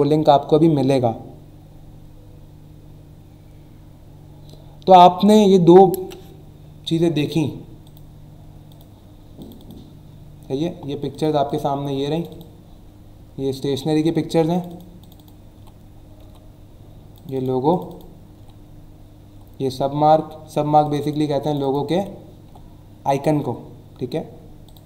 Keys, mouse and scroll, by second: 7.8 click, 8.8 click, 9.4 click, 11.1 click, 11.5 click, 12.1 click, 14.5 click, 15.0 click, 17.1 click, 17.7 click, 18.3 Left, 19.3 Left, 20.8 click, 21.4 click, 24.6 click.